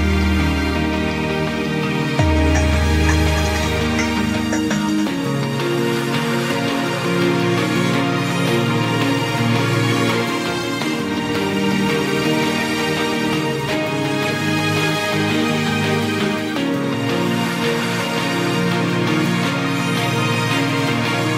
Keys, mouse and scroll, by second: 1.3 e, 1.6 s, 4.9 Tab, 5.0-6.0 scroll down 3, 6.2-7.1 middle drag, 7.1 KP_1, 7.6 shift+middle click, 8.2 scroll down 2, 8.5-9.4 middle drag, 9.4 KP_1, 10.3 click, 10.6-10.9 scroll up 1, 10.9 scroll down 2, 11.1 Tab, 11.4 scroll up 1, 11.6-12.5 middle drag, 12.5 KP_1, 13.0-13.5 scroll up 1, 13.5 ctrl+r, 15.3-17.1 middle drag, 17.1 3, 17.6 drag, 18.2-19.0 middle drag, 19.0 shift+click, 19.8 KP_3, 20.1-20.5 scroll up 1, 20.5 shift+middle click, 21.0 scroll up 1, 21.1-21.3 scroll down 1.